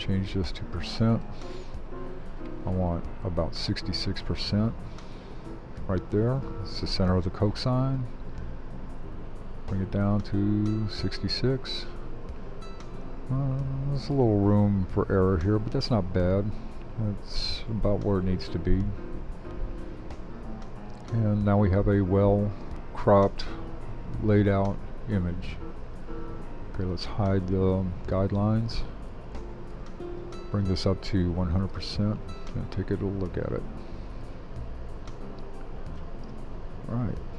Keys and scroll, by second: 28.1 super+h.